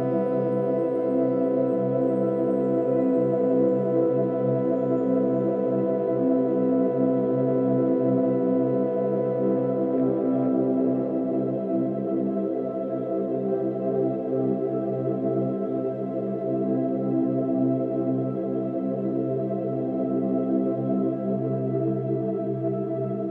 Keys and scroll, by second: 3.3 ctrl+-, 3.5 ctrl+=, 4.4 ctrl+-, 4.8 space, 6.0 ctrl+-, 6.1 ctrl+=, 6.2 ctrl+-, 22.4 space.